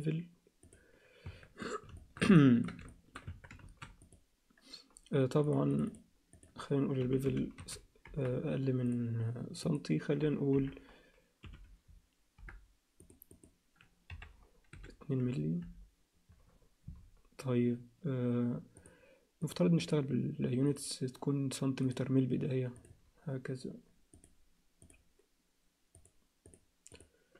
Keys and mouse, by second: 1.2 Tab, 2.0 alt+shift+middle click, 2.4 ctrl+alt+middle click, 2.9 alt+shift+middle click, 3.3 Tab, 3.6 ctrl+a, 5.5 click, 6.4-16.3 drag, 18.8 click, 19.4 click, 20.7 click, 21.8-22.8 drag, 24.1 click, 26.0 click, 26.5-27.3 drag.